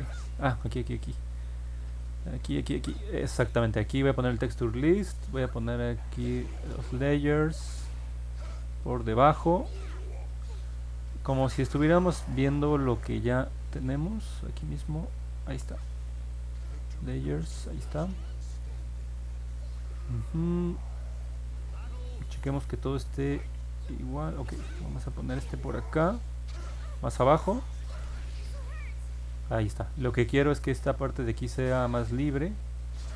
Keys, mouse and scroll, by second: 6.2-9.8 drag, 11.4-14.6 drag, 16.3 click, 20.1-21.9 scroll down 5, 22.1-22.8 scroll up 2, 23.0 middle click, 23.5 middle click, 25.1-28.6 drag.